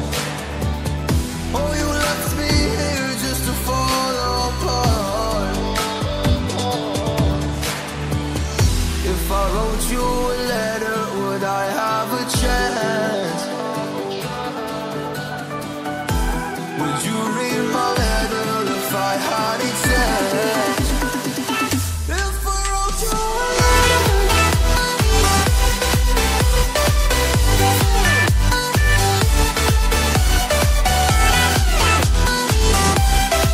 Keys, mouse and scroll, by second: 5.5 scroll down 1, 5.8 scroll up 1, 7.1 scroll down 1, 8.2-8.6 shift+scroll up 1, 9.1 click, 20.5-20.9 scroll down 2, 21.1 scroll down 1, 21.4-22.0 scroll up 1, 22.0 right click, 22.7 click, 24.3 scroll up 1, 24.6 click, 24.8 double click, 26.3-26.9 scroll down 1, 26.9 scroll down 1, 26.9 scroll up 1, 27.3-28.6 scroll down 1, 29.3 click.